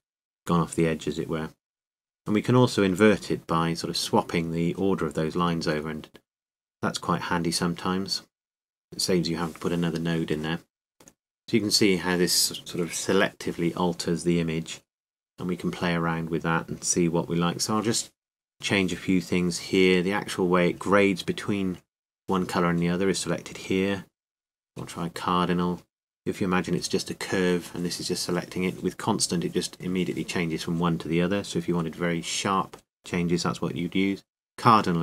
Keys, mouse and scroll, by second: 1.6 middle click, 1.8 middle click, 4.9-6.4 drag, 13.8-15.5 drag, 22.4-25.6 drag, 33.5-35.0 drag.